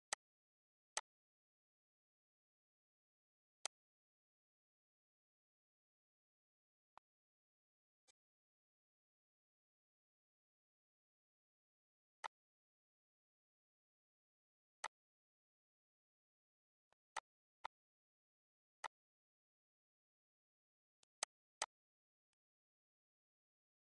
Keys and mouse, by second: 1.9 click, 5.3 click, 6.3 click, 10.5 click, 13.2 click, 14.6 ctrl+z, 15.6 click, 17.6 click, 20.0 click, 21.3 click, 22.0 ctrl+z.